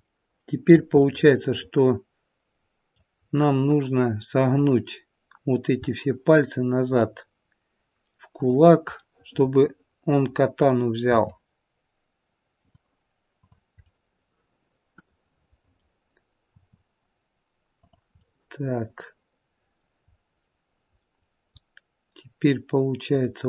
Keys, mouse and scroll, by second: 0.1 shift+middle click, 0.9 middle click, 4.0-4.5 scroll up 2, 4.5 click, 5.8-6.9 scroll up 1, 7.6 middle click, 8.3 click, 11.0 middle click, 11.0 r, 13.4 click, 13.9 middle click, 16.9 r, 18.1 middle click, 20.1-20.6 scroll up 2, 21.0 middle click, 23.1 click.